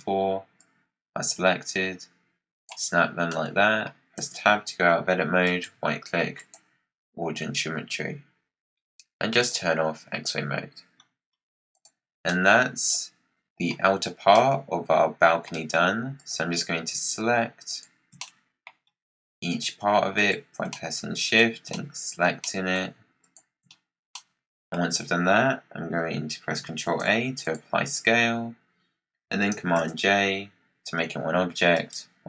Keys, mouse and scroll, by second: 0.5 click, 3.2 middle click, 4.1 Tab, 5.3-8.5 right drag, 9.3-10.9 drag, 10.9-11.6 scroll down 7, 11.6 click, 12.1 scroll down 2, 12.2-13.6 middle drag, 13.6-14.2 scroll down 3, 14.2-16.1 middle drag, 16.1 click, 17.6 shift+click, 18.1-18.8 middle drag, 18.8-20.1 scroll up 8, 20.1 shift+click, 20.6-23.1 middle drag, 23.1 shift+click, 23.6-24.0 scroll down 6, 24.0-24.7 middle drag, 24.7-26.8 scroll down 1, 26.8 ctrl+a, 29.7 j, 31.6-32.2 right drag.